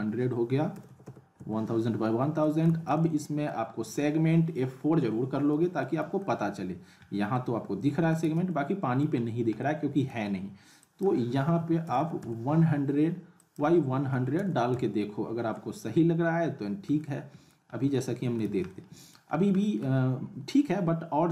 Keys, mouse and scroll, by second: 2.4 middle click, 2.7 z, 2.9-3.5 alt+middle drag, 4.9 F4, 5.8-6.4 alt+middle click, 6.4-7.3 scroll up 2, 7.3-8.3 alt+middle click, 8.2 z, 8.5-9.1 alt+middle click, 9.3 scroll up 1, 9.6-10.2 alt+middle click, 10.8 click, 13.4 click, 16.8 click, 17.0-17.6 alt+middle click, 17.7 scroll up 1, 17.9-18.5 alt+middle click, 18.4 z, 18.7-19.3 middle click, 19.3 scroll up 1, 19.6 alt+middle click, 20.0 scroll up 1.